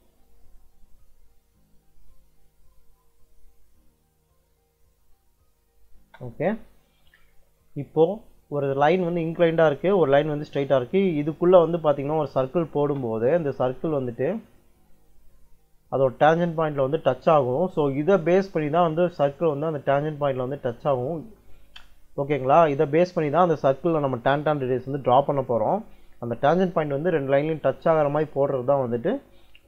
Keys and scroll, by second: 5.9 space, 12.4 c, 12.7 space.